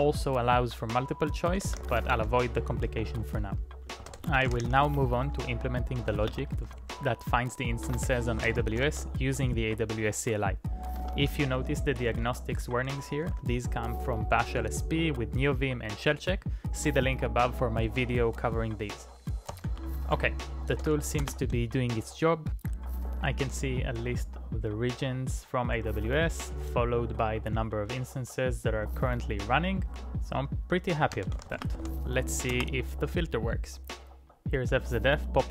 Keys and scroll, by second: 1.7 ctrl+a, 2.1 ctrl+a, 2.3-9.4 typing, 11.0 Tab, 11.6-13.7 typing, 19.5-20.4 typing, 20.8 ctrl+e, 21.2 Return, 30.8-32.7 typing, 35.4-35.5 typing.